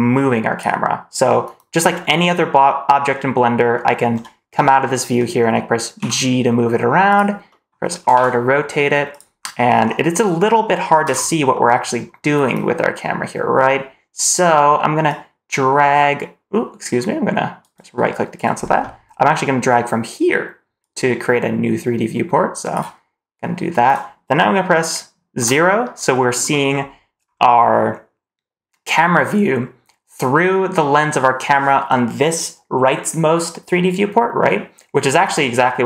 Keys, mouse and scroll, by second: 0.0 click, 1.7 scroll down 2, 3.6 middle drag, 4.1-5.6 scroll down 1, 7.4 middle drag, 7.4 g, 7.9 r, 11.0 ctrl+z, 11.6 middle click, 15.0-17.9 drag, 20.7-21.9 drag, 22.1 click, 25.3 KP_0, 26.6-27.2 scroll up 4.